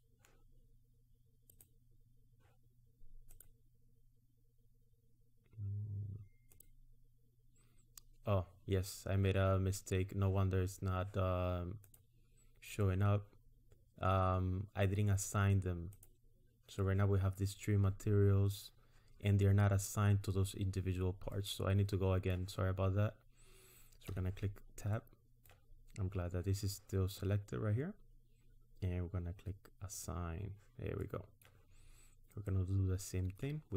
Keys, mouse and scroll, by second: 1.5 click, 3.3 click, 6.5 click, 10.6 scroll up 1, 11.8 click, 16.0 click, 19.8 scroll up 1, 21.3 middle click, 24.2 Tab, 24.9 middle click, 25.9 scroll up 1, 29.9 click, 31.0 middle click, 31.8 scroll up 2, 32.6 middle click.